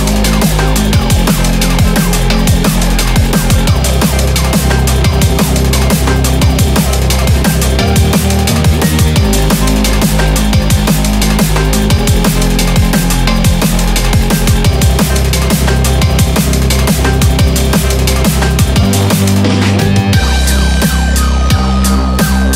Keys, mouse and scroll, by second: 0.3 shift+middle click, 0.8-1.3 scroll up 3, 1.3 shift+middle click, 1.8-2.3 scroll up 2, 2.3 scroll down 1, 3.0 click, 3.8 2, 3.9 click, 4.2 click, 4.7 shift+click, 5.2 shift+click, 8.6 x, 10.3 middle click, 11.2 shift+middle click, 13.1 shift+click, 14.5 x, 15.7-16.5 scroll down 1, 16.5 click, 17.5 shift+click, 17.9 click, 18.4 click, 18.8 shift+click, 20.2 x, 21.1 click, 21.5 x.